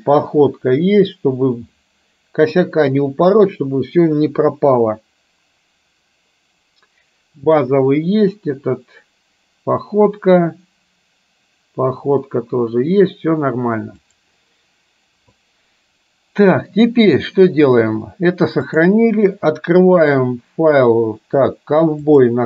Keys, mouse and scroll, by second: 18.7-22.4 drag.